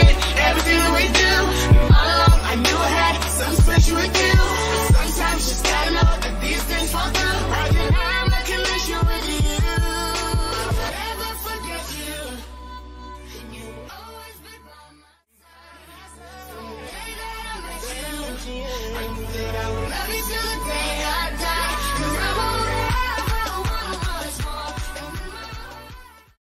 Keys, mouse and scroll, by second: 3.5 scroll down 1, 4.1-12.4 drag, 13.3-16.1 drag, 16.3 click.